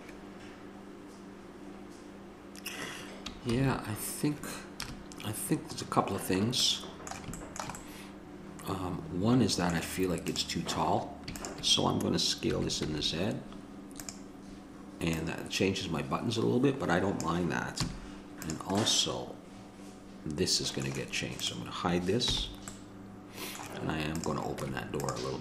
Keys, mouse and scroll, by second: 4.2 shift+z, 5.0 KP_0, 6.1 middle click, 9.7 middle click, 10.5 right click, 11.1 middle click, 12.7 s, 18.1 a, 19.1 middle click, 19.4 click, 19.7 middle click, 19.8 click, 20.0 middle click, 22.4 h, 22.9 middle click, 24.4 right click, 24.8 Tab.